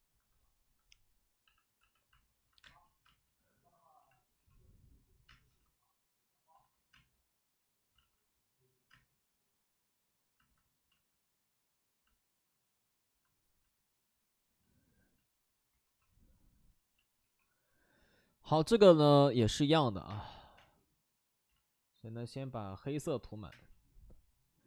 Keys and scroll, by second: 1.0-5.2 typing, 6.5 ctrl+z, 6.9 space, 7.9 ctrl+z, 8.8 space, 10.8 ctrl+z, 15.7 ctrl+d, 16.9 b, 17.1 p, 20.0 space, 20.5 space, 21.4 ctrl+z, 22.8 ctrl+z, 23.2 c, 23.4 space.